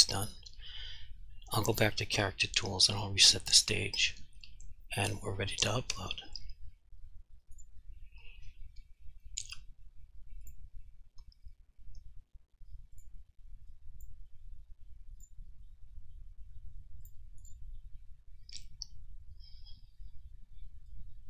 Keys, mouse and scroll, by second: 1.8 click, 7.6 click, 10.5 click, 13.9 click, 15.3 click, 21.1 click.